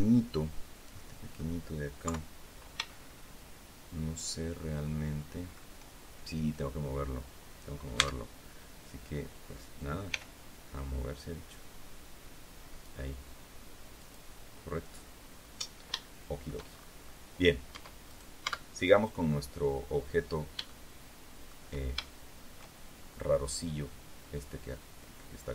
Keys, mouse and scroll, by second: 0.8 middle click, 1.9 KP_3, 2.8-5.6 shift+middle drag, 7.9 Tab, 10.0 g, 13.9 click, 15.2-15.8 scroll down 2, 15.9 shift+middle click, 17.6 Tab, 18.0 right click, 18.3 Tab, 20.6 shift+middle click, 21.9 shift+middle click, 22.9-23.2 shift+scroll up 3.